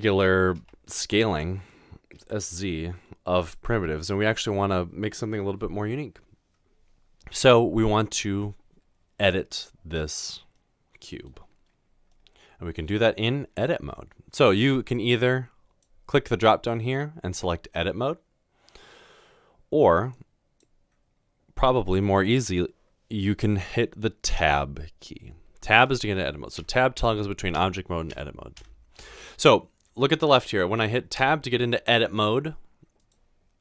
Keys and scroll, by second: 0.6 typing, 2.1 typing, 24.4 Tab, 25.8 Tab, 26.6 Tab, 27.0 Tab, 27.5 typing, 28.1 Tab, 29.0 Tab, 31.2 Tab.